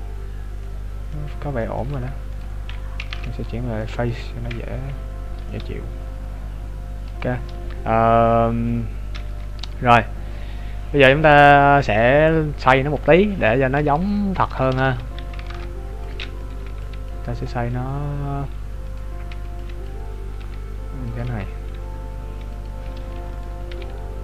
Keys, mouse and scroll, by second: 0.6 middle click, 0.6 scroll up 14, 2.1 Tab, 2.4 right click, 3.1 ctrl+Tab, 4.2 right click, 4.7 KP_Decimal, 5.5 middle click, 7.5 scroll up 2, 9.0 scroll up 3, 9.3 KP_3, 9.8-11.0 scroll down 12, 11.2 scroll up 1, 12.8 scroll up 3, 14.0 shift+middle click, 14.0 scroll up 5, 14.9 z, 15.2 scroll down 3, 15.4 ctrl+Tab, 16.5 right click, 16.7 b, 18.9 right click, 19.3 b, 20.4 r, 21.3 g, 23.4 right click, 23.7 b.